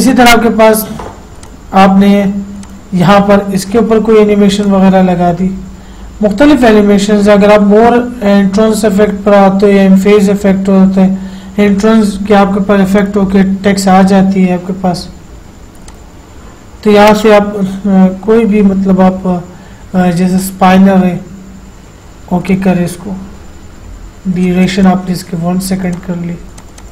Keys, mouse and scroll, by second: 0.6 click, 4.9 click, 13.3 click, 16.2 click, 17.6-18.1 scroll down 1, 20.7 click, 22.8 click.